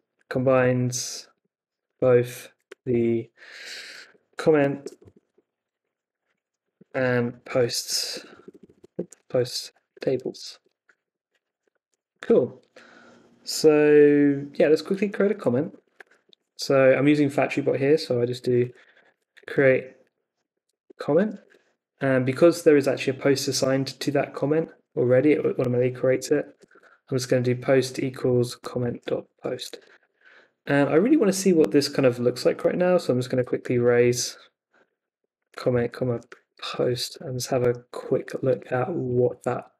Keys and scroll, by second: 0.0-3.2 typing, 4.2-12.2 typing, 10.6 Escape, 15.0-21.8 typing, 25.8-30.6 typing, 32.8-39.7 typing, 34.3 Left.